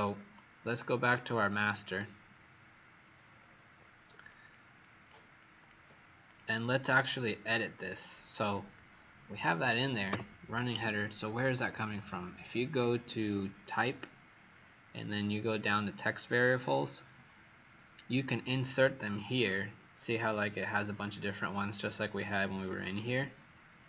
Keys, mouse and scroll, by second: 1.4 click, 1.6 click, 3.1 alt+scroll up 2, 6.9 click, 10.0 BackSpace, 10.6 Escape, 11.7 click, 22.7 click.